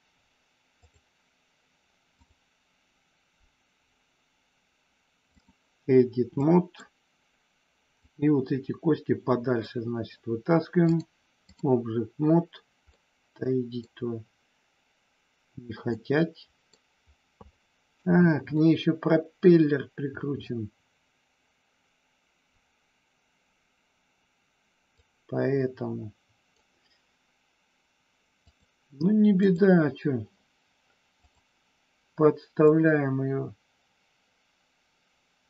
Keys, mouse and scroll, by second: 2.1-5.4 drag, 6.5 click, 7.9-9.7 drag, 10.9 click, 12.9-13.9 middle drag, 15.9 middle click, 17.5 shift+middle click, 18.5-20.4 middle drag, 25.0-26.5 drag, 29.4 click, 31.1 click, 32.8-35.4 drag.